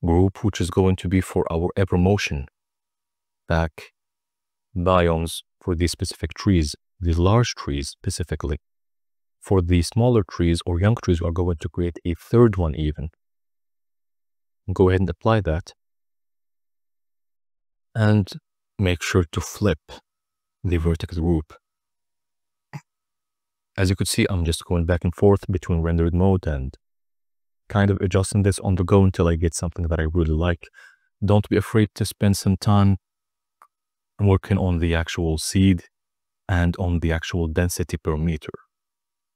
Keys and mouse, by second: 0.0 KP_0, 2.5 click, 8.0-9.5 drag, 10.2 drag, 15.5-16.8 drag, 17.4-19.5 drag, 20.8-22.4 middle drag, 24.4 KP_0, 25.2 z, 33.5-39.3 drag.